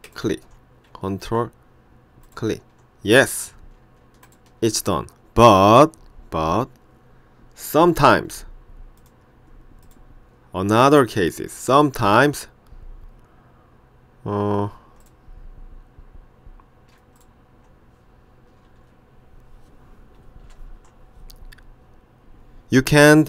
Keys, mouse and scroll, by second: 0.1 ctrl+click, 2.3 ctrl+click, 4.3 ctrl+click, 9.0 click, 10.9 click, 11.8 click, 15.1 click, 17.2 shift+click, 20.5 ctrl+p.